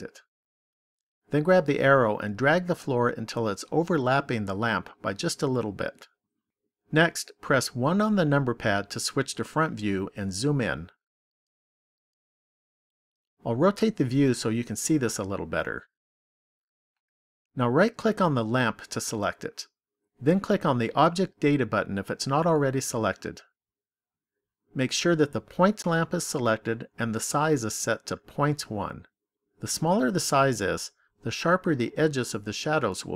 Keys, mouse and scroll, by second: 2.6 click, 7.7 KP_1, 9.6-12.3 scroll up 10, 12.3-14.0 scroll up 2, 14.0 middle click, 17.8 right click, 21.4 click, 23.1 click.